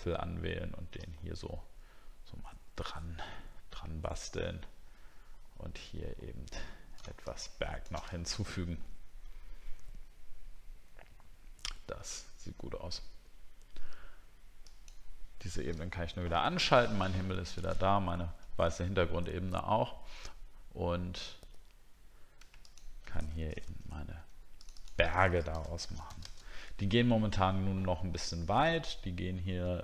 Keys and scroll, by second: 8.2-8.6 alt+scroll down 3, 16.0 alt+scroll down 1, 23.6 ctrl+g, 25.5 shift+b.